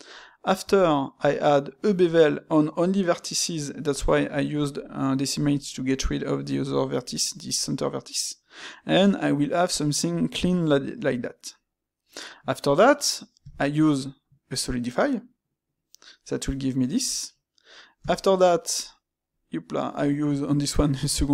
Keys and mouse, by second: 16.1-21.3 middle drag.